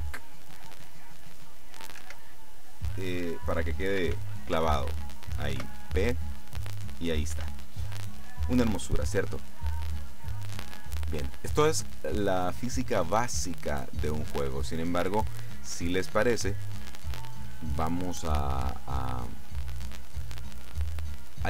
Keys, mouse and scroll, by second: 2.1 Escape, 4.2 ctrl+z, 5.7 p, 7.4 Escape, 11.0-15.4 drag, 16.2-17.4 scroll up 2, 17.4 scroll up 1.